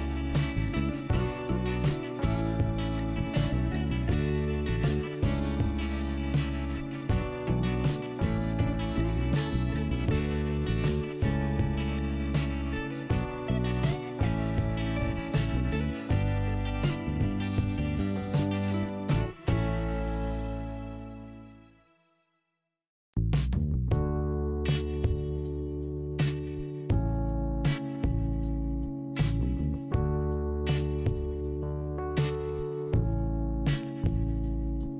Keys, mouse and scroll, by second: 1.2 click, 2.2 click, 4.1 click, 4.2 click, 4.7 scroll down 1, 5.5 click, 7.4 click, 8.9 scroll down 1, 10.5 click, 11.4 click, 14.0 click, 14.1 click, 15.1 click, 15.7 click, 17.2 click, 18.5 click, 19.6 click, 21.0 scroll down 1, 23.1 click, 23.1 5, 25.7 click, 26.8 click, 28.3 p, 29.4 click, 34.4 scroll up 2.